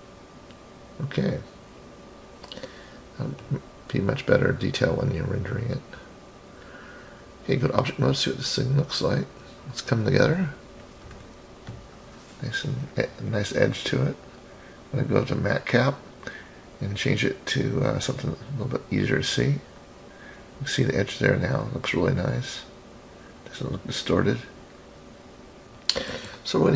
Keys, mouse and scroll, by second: 0.3 middle click, 1.2-1.7 scroll down 2, 1.6 click, 2.1-2.8 scroll up 1, 2.8-4.6 middle drag, 2.8 scroll up 2, 6.4-7.7 drag, 9.1 click, 10.1 scroll up 3, 14.2-19.4 drag, 19.8 scroll down 2, 20.5-23.7 middle drag, 25.1-25.6 middle drag, 25.6 KP_3.